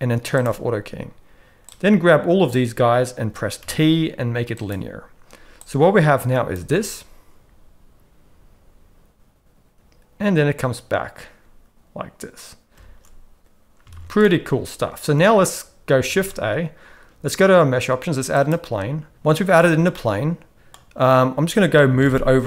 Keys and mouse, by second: 0.4 click, 1.7-2.5 drag, 3.6 t, 5.7-6.6 drag, 6.6 space, 12.8 space, 13.9 alt+a, 14.2-15.2 middle drag, 16.1 shift+a, 19.1 middle click, 19.1 s, 19.9 middle click, 21.9 g.